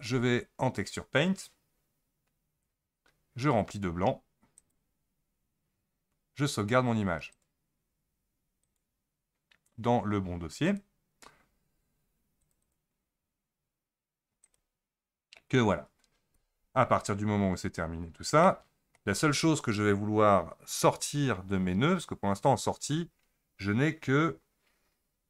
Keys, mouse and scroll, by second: 0.0 Tab, 4.6-10.4 drag, 16.3 Tab, 17.4-18.5 scroll up 17, 18.5-21.5 middle drag.